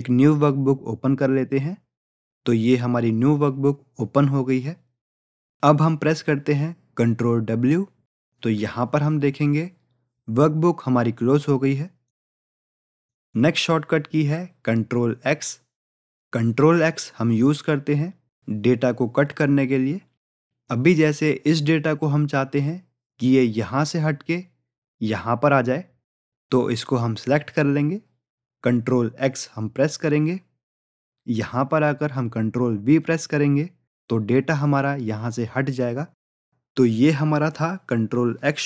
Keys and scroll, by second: 7.4 ctrl+w, 29.3 ctrl+x, 33.0 ctrl+v.